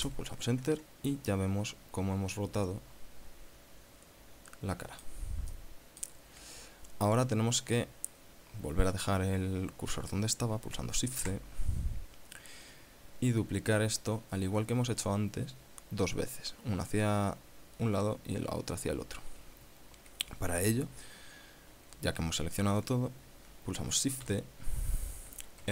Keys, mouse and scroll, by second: 0.4 Return, 1.8-5.7 middle drag, 6.0 middle click, 11.6 shift+c, 12.7 scroll up 2, 24.7 shift+d.